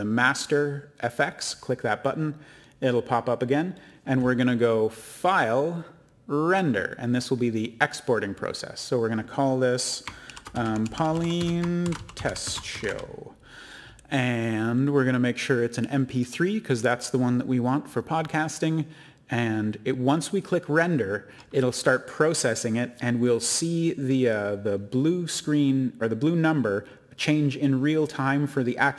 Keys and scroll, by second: 10.0-13.3 typing.